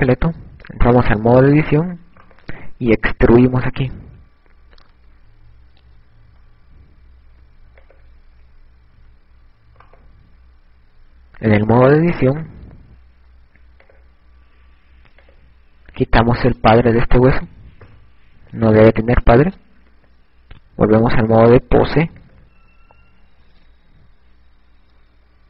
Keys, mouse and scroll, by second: 0.7 right click, 1.7 Tab, 3.4 right click, 5.1 e, 9.1 click, 10.0 a, 13.9 click, 16.3 click, 22.4 click.